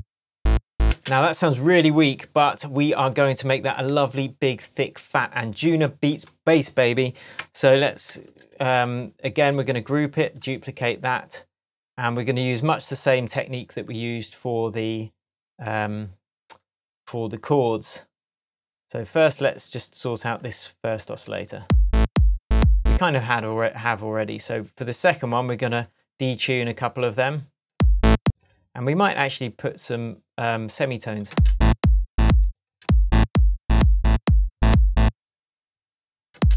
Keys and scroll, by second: 0.8 space, 3.8 super+s, 8.0 super+g, 21.6 space, 22.9 space, 27.7 space, 31.2 space, 32.4 space.